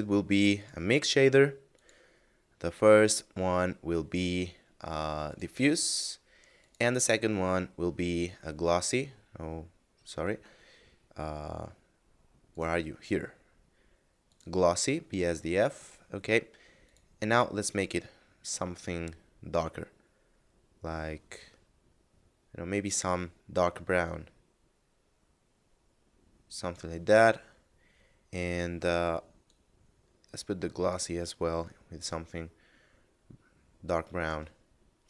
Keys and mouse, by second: 5.2 click, 12.5 click, 16.8 click, 24.0 click, 28.7 click, 32.0 click.